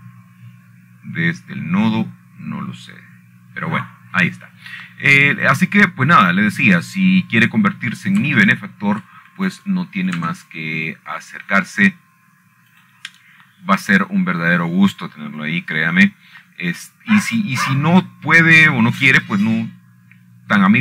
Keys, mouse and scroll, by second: 0.0-0.5 drag, 1.0-1.5 scroll down 3, 2.0-2.3 scroll down 3, 2.3 scroll up 1, 2.7 scroll down 1, 2.8 scroll up 1, 3.4-3.7 scroll down 2, 4.0 scroll up 2, 4.4 scroll down 4, 5.5 scroll down 2, 8.1-9.2 drag, 10.2-10.9 scroll up 1, 11.1 shift+middle drag, 11.7 shift+middle click, 12.2 click, 15.4 click, 19.2-20.8 scroll down 7.